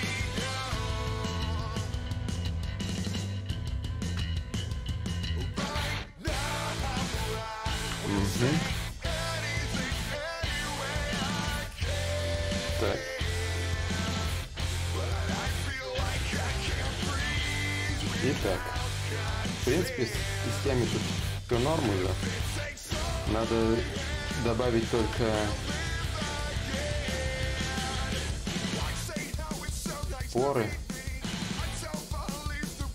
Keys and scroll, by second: 22.9 b, 23.7 d, 24.0 i, 27.3 ctrl+z, 32.0 ctrl+z, 32.0 ctrl+y.